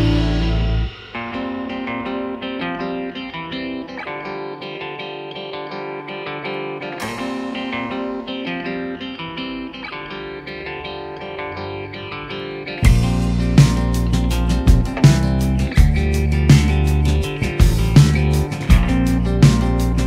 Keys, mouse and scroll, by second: 1.5 click, 1.6 drag, 2.5 click, 3.2 click, 3.3 click, 3.7-4.0 drag, 6.7 click, 7.3 drag, 9.3 click, 9.8 click, 10.5 click, 10.8-11.2 drag, 11.3 drag, 11.4 click, 13.4 click, 16.0-18.3 drag.